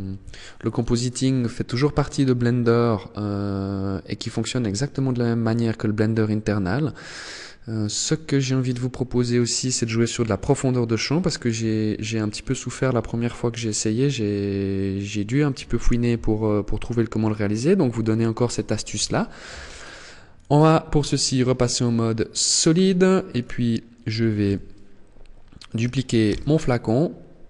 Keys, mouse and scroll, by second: 19.5 click, 20.5 click, 21.1-21.5 scroll down 2, 21.9-22.5 scroll up 1, 22.5 right click, 23.6 KP_1, 25.5 shift+d.